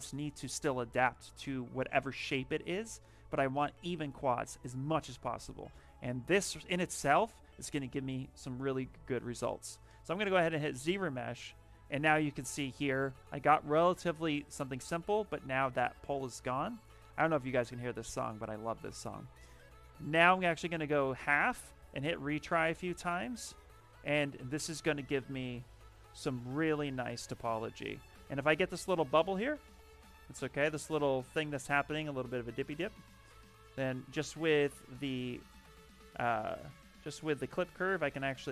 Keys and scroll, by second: 36.6 space.